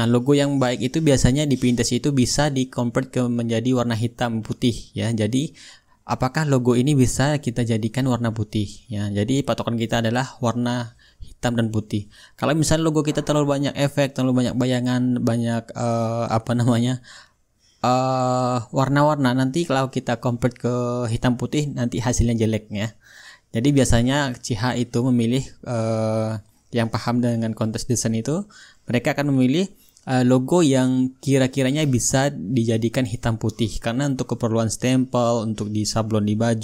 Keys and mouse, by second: 8.2-11.3 drag, 13.7-16.9 drag, 16.8 ctrl+z, 17.4-23.7 drag, 18.3-20.1 shift+right drag, 23.8-28.7 drag, 31.9-35.1 drag, 34.3 right click, 35.2-36.4 drag.